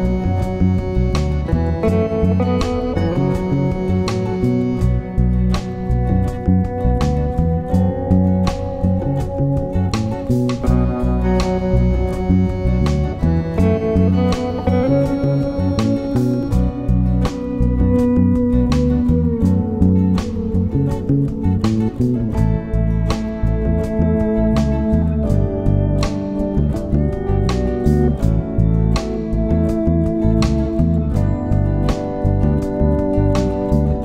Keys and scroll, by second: 6.1 super+Return, 9.6 super+Return.